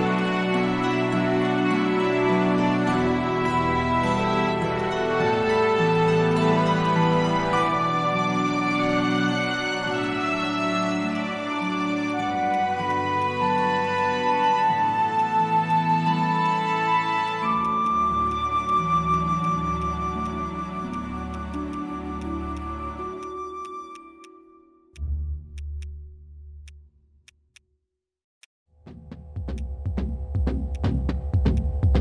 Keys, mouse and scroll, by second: 10.8 shift+click, 11.6 shift+click, 12.0 shift+click, 14.4 shift+click, 15.6 shift+click, 16.4 shift+click, 17.2 shift+click, 18.6 shift+click, 19.1 shift+click, 28.4 alt+click, 29.6 alt+click, 30.7 alt+click, 31.6 alt+click.